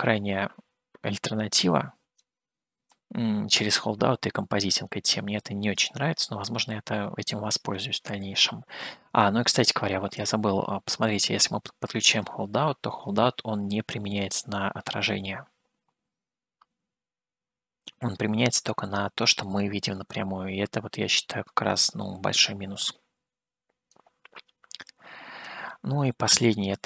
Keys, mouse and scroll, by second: 1.6 click, 3.3-6.2 drag, 7.5-9.1 drag, 10.4-12.9 drag, 15.3-22.0 middle drag, 24.1-25.1 drag, 25.8-26.3 scroll down 2.